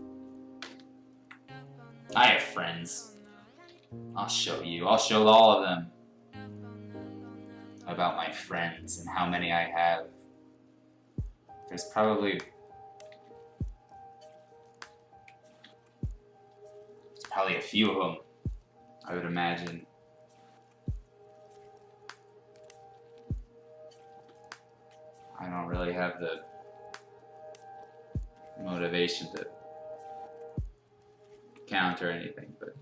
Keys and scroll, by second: 2.7 ctrl+z, 3.6 ctrl+z, 5.0 ctrl+z, 8.8 ctrl+z, 9.7 ctrl+z, 12.0 ctrl+z, 13.0 ctrl+z, 14.9 ctrl+z, 15.4 ctrl+z, 31.7 ctrl+z.